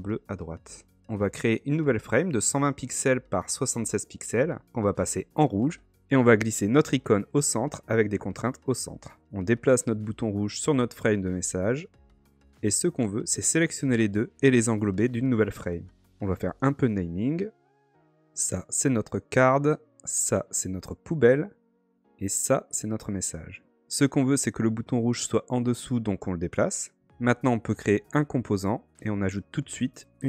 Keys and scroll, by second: 13.8 alt+super+g.